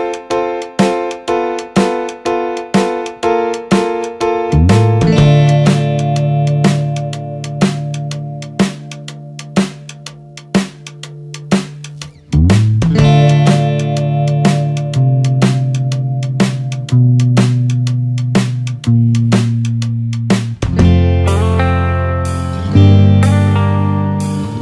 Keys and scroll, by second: 2.6 ctrl+-, 3.3 ctrl+0, 12.5 ctrl+=, 14.4 ctrl+0.